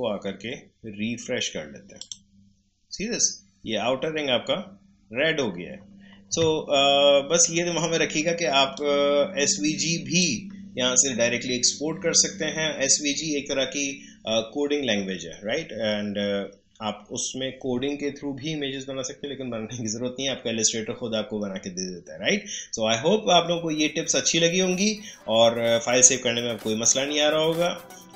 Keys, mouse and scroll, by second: 1.9 click, 8.7-12.7 drag.